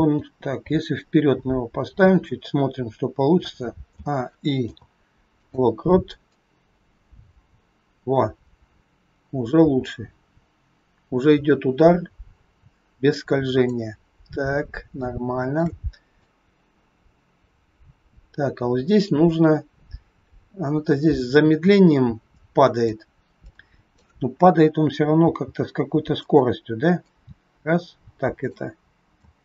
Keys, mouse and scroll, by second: 4.5 a, 4.5 i, 6.4 click, 14.1-14.9 scroll down 4, 14.9 shift+middle click, 16.1 click, 23.5 click, 25.1 g, 27.0 click, 29.3 space.